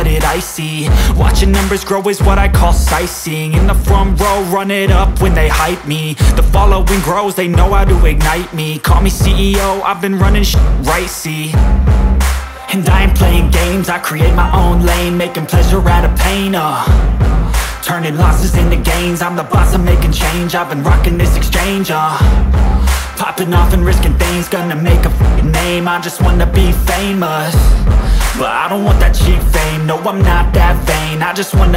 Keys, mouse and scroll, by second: 0.7-1.4 scroll down 2, 0.8 click, 1.4 click, 2.0-2.5 scroll down 2, 2.1 click, 2.5 click, 3.0-3.5 scroll down 2, 3.2 click, 3.5 scroll up 1, 3.6 click, 3.9-4.6 scroll down 2, 4.1 click, 4.6 click, 4.9 scroll down 1, 5.2 click, 5.9 scroll up 1, 6.1 click, 6.3 scroll down 1, 6.4 scroll up 1, 6.5 click, 6.9-7.2 scroll down 1, 7.2 scroll up 1, 7.5 click, 8.0 scroll up 1, 8.1 click, 8.4 scroll down 1, 8.6 click, 9.8 scroll down 1, 9.9 scroll up 1, 10.1 click, 10.4 scroll down 1, 10.5 scroll up 1, 10.7 click, 11.0-11.6 scroll down 2, 11.1 click, 11.6 click, 12.0 scroll down 1, 12.2 click, 12.5 scroll down 1, 12.7 click, 13.2 scroll down 1, 13.3 scroll up 1, 13.4 click, 13.9 scroll up 1, 14.0 click, 15.3 scroll down 1, 15.5 click, 15.8 scroll down 1, 16.0 click, 17.4 scroll down 1, 17.6 click, 18.0 scroll down 1, 18.1 scroll up 1, 18.3 click, 19.2 click, 25.0-25.5 scroll down 1, 25.5-25.8 scroll up 1, 26.2 click, 27.6-28.2 scroll down 1, 29.6 click.